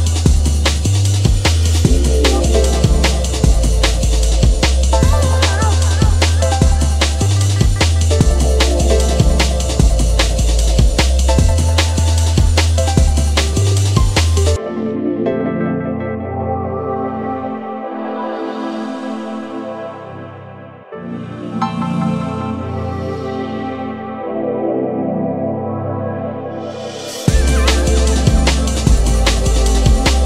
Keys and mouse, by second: 0.3 click, 0.6 shift+g, 1.0 shift+click, 2.4 click, 3.6 shift+g, 4.3 shift+click, 4.9 alt+click, 5.3 g, 7.0 shift+click, 7.3 Tab, 10.1 KP_Decimal, 11.1 click, 11.3-15.3 drag, 14.3 g, 17.1 click, 18.4 click, 19.6-21.4 drag, 22.8 space, 25.0 space, 25.4 click, 25.8 ctrl+Tab, 27.3 click, 28.2 f, 28.8 click.